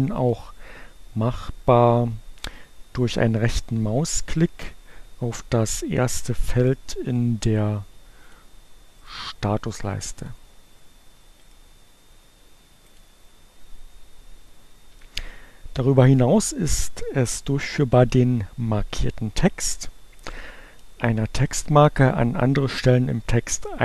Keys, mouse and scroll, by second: 7.9 click, 8.7 right click, 10.1 click, 11.2 right click, 12.4 click.